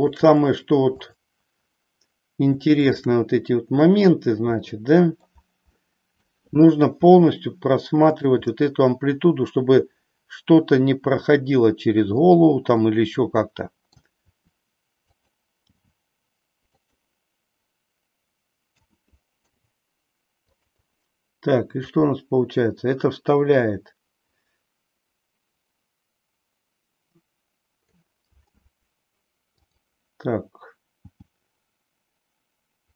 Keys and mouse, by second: 2.9-4.0 shift+drag, 4.6 middle click, 5.9 middle click, 7.1 r, 8.5-12.2 middle drag, 12.7-14.0 middle drag, 14.2 r, 15.9 g, 16.9 click, 18.7 a, 19.3 i, 21.9-28.0 drag, 29.5 click, 31.1 g.